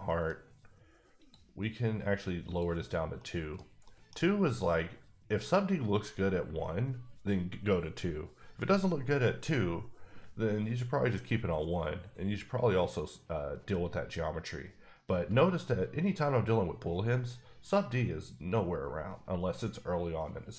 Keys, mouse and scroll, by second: 0.0 middle click, 1.2 click, 2.5 click, 3.1 middle click, 3.8 middle click.